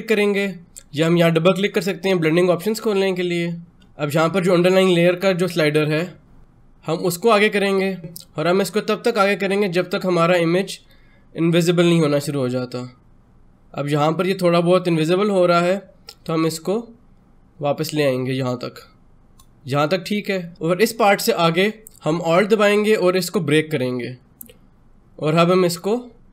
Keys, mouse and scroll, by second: 1.3 click, 6.2 click, 7.1-17.8 drag, 23.1-26.3 alt+drag.